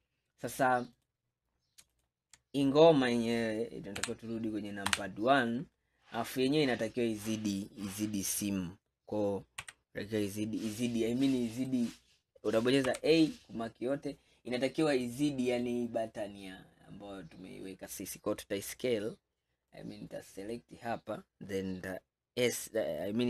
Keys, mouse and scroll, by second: 1.0 click, 1.9 alt+click, 4.1 KP_3, 4.9 KP_1, 6.0-6.5 scroll down 5, 6.9-7.3 scroll up 2, 9.7 s, 12.9 a, 14.2-14.9 scroll up 2, 14.9-18.1 scroll down 2, 19.8 click.